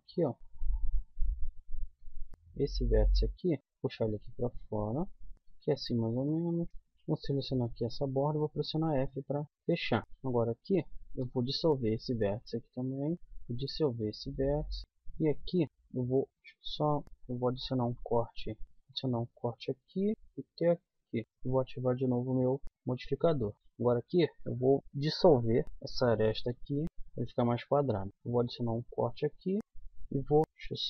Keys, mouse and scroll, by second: 0.3 middle click, 0.8 middle click, 2.5-3.6 middle drag, 5.1 middle click, 6.1 middle click, 6.7 a, 8.7 f, 9.3 a, 10.3 right click, 11.2 x, 14.1 middle click, 15.4 middle click, 16.3 middle click, 16.3 click, 16.9 middle click, 17.8 k, 18.8 k, 21.6-22.6 middle drag, 22.6 a, 22.7 middle click, 23.6-25.6 middle drag, 25.6 right click, 26.3 x, 27.5 middle click, 27.9 click, 28.1 ctrl+r, 30.4 k, 30.7 click.